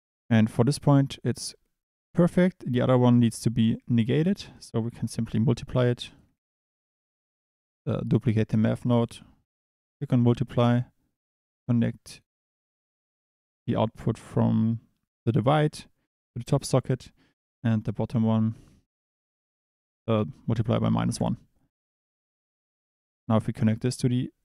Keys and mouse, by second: 2.6 click, 4.5 click, 6.1 click, 6.3 shift+d, 9.1-10.1 drag, 11.3 drag, 18.6-21.2 drag, 23.3 click.